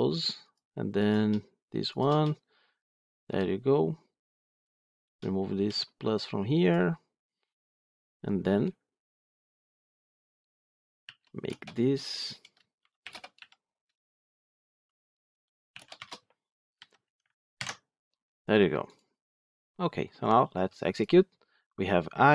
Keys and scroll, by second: 17.5 ctrl+alt+l.